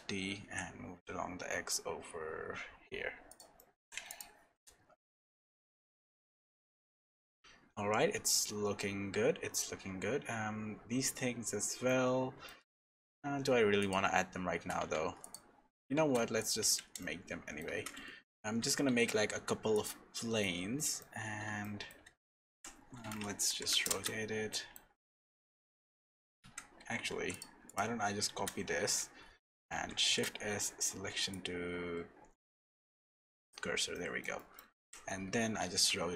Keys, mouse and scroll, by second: 0.0 alt+d, 3.6 middle click, 4.1 click, 4.5 KP_0, 5.9 scroll up 1, 6.6-7.4 scroll up 4, 10.0-10.7 scroll down 2, 11.8 shift+middle click, 13.8 click, 14.8 Tab, 15.2 click, 16.0 shift+s, 16.6 Tab, 17.0 shift+middle click, 17.7 shift+a, 18.9 shift+a, 20.1 middle click, 21.2-21.6 scroll up 4, 21.6 shift+middle click, 22.1-22.5 scroll down 2, 22.5 r, 24.5 middle click, 25.2 shift+middle click, 25.8 x, 27.6 click, 28.3 shift+d, 30.0 shift+s, 33.9 shift+middle click, 34.8 r.